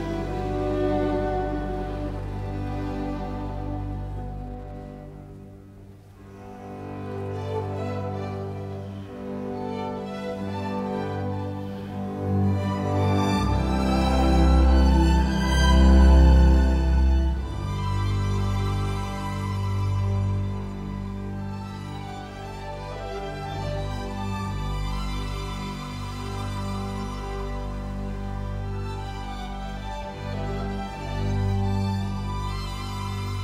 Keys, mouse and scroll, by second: 6.9 middle click, 14.1 t, 14.2 space, 18.7 t, 18.9 space.